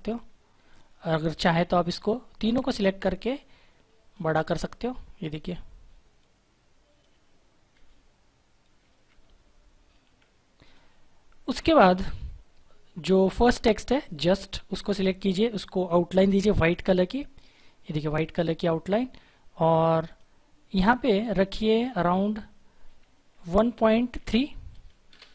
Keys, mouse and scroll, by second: 3.3 shift+click, 9.2 Left, 10.6 click, 16.0 click, 20.0 click, 25.1 Return.